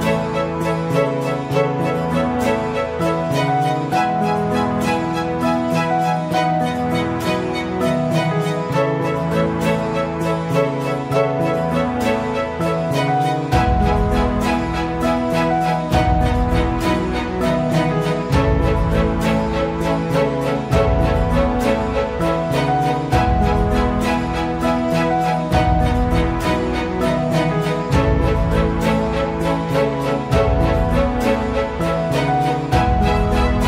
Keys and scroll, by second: 0.6 space, 5.1 space, 11.0 space, 11.2 space, 14.1 space, 18.3 space, 20.5 space, 22.1 space, 27.8 space.